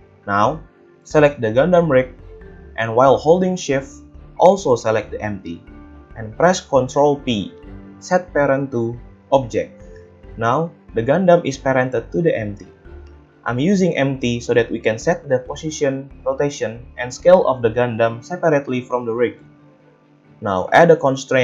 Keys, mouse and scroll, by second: 0.0-2.4 middle drag, 2.4 click, 4.4 shift+click, 6.1 ctrl+p, 10.2 a, 11.1 g, 16.2-21.4 middle drag.